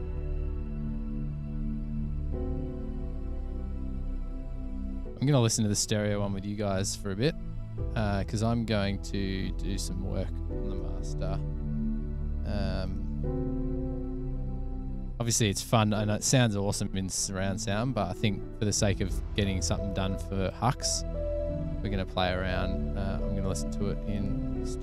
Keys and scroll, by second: 5.2 super+=, 6.4 super+=, 7.2 super+Tab, 7.9 super+Tab, 8.5 super+Tab, 11.3 super+n.